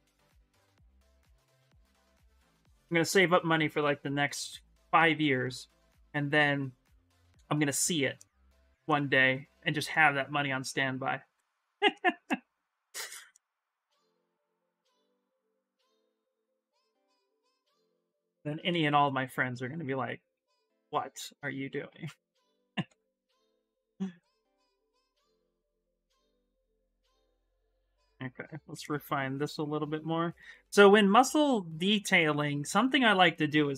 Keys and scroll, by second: 15.5 x, 17.7-19.1 typing, 25.0-26.0 typing, 32.4 s, 33.4 s.